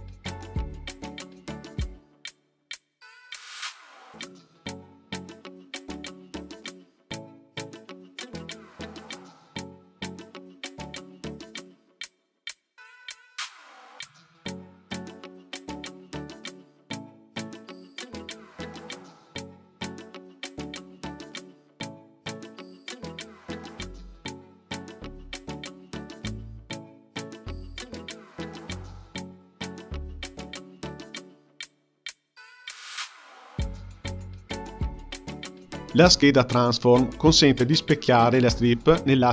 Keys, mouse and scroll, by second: 9.9 click, 10.7-12.2 drag, 12.4-15.3 drag, 15.6-17.1 drag, 19.5 click, 20.9-25.4 drag, 25.4 space, 25.8 space, 26.4-27.8 drag, 30.6-33.6 drag, 33.6 space, 34.9 space, 36.3-39.3 drag.